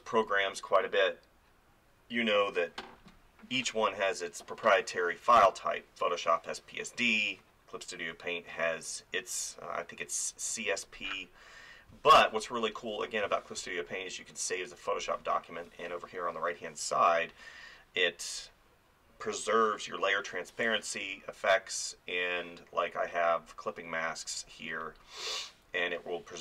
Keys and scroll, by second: 11.9 space.